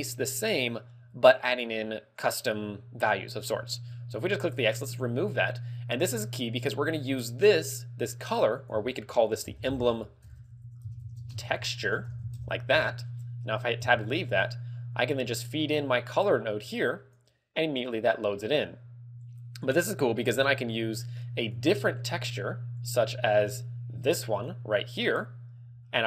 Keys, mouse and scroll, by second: 4.6 click, 5.1-6.1 scroll up 5, 6.7 click, 8.6 click, 13.1-13.9 scroll down 5, 13.9 Tab, 16.1 click, 19.3 click, 20.4 click, 24.8 click.